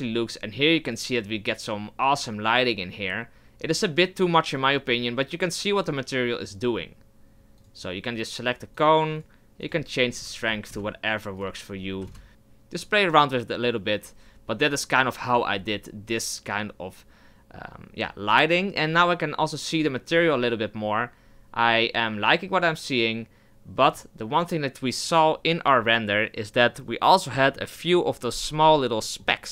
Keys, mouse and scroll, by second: 0.4 right click, 7.6 click, 8.7 click, 9.6-12.3 drag, 19.0 right click, 23.9 click.